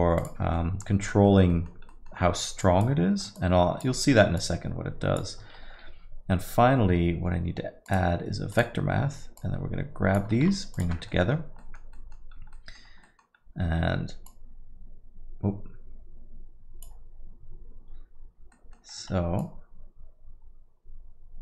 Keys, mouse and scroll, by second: 0.6 middle click, 1.1 middle click, 1.5 middle click, 1.9 middle click, 2.1 scroll down 1, 2.6 scroll down 2, 2.7 click, 3.4 shift+click, 4.4 click, 5.5 shift+a, 9.5 click, 11.1 ctrl+shift+click, 11.2 middle click, 11.6 middle click, 11.9 middle click, 12.4 scroll up 2, 12.5 middle click, 12.8 scroll down 1, 13.0 middle click, 13.4-13.8 scroll up 1, 14.2 click, 18.5 middle click, 19.4 shift+click.